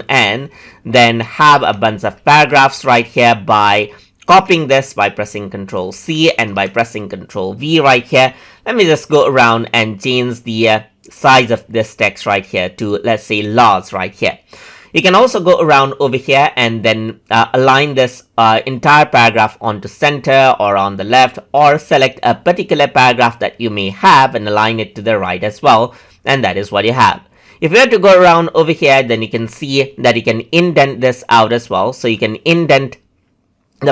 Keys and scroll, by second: 2.2 ctrl+z, 4.1 ctrl+c, 6.4 ctrl+v.